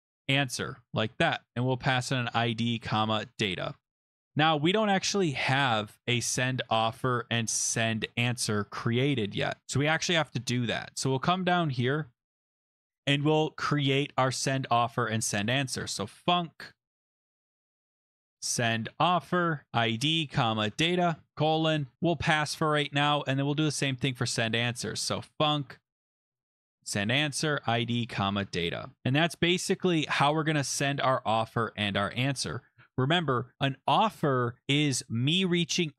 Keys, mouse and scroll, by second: 0.0-4.2 typing, 4.5 click, 6.0 click, 6.2 click, 6.6 click, 6.7 click, 6.9 ctrl+f, 7.5 click, 7.7 click, 7.9 ctrl+f, 9.1 click, 10.4-11.1 scroll down 3, 11.4 click, 12.0 Return, 12.2 Return, 12.3 BackSpace, 13.5 Return, 13.5 middle click, 13.5 \, 14.3 BackSpace, 15.5-29.0 typing, 23.0 Return, 29.0 Down, 29.1 Right, 29.8 Left, 30.1 Left, 30.5-32.8 typing.